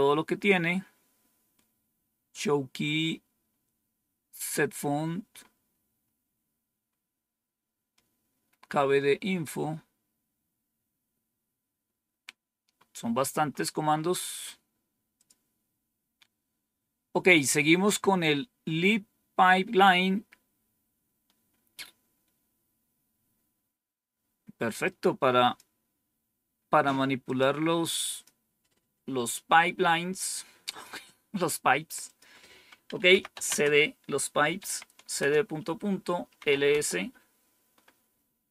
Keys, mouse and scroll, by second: 11.4-12.6 scroll up 2, 12.6 scroll up 1, 15.1 click, 24.7 click, 27.2 click, 28.0 click, 30.6 click, 32.0 click, 32.8-36.9 typing.